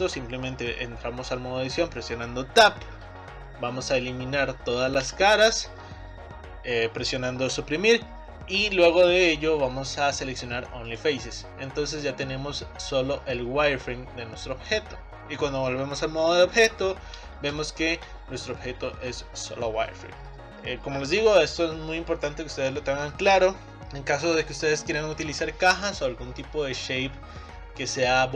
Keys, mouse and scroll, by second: 5.0 Delete, 11.7-13.4 middle drag, 13.4 click, 15.2-16.4 drag, 17.6 click, 18.4-21.4 middle drag.